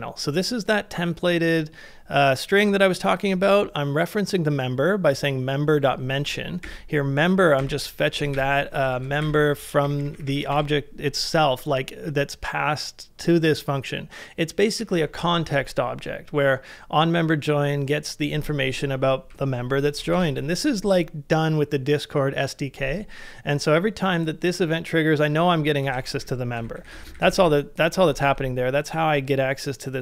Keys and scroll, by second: 6.6 shift+3, 8.3-11.0 typing, 8.9 ctrl+c, 19.3 ctrl+c, 20.1 shift+v, 26.0 ctrl+c, 26.2 shift+8, 26.7 shift+8, 28.1 shift+v.